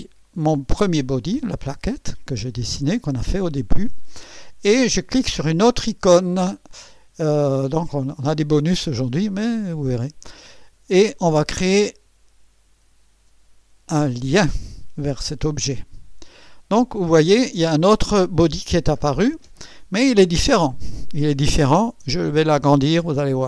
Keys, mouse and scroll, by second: 0.2 click, 15.8 click, 23.4 alt+scroll up 2.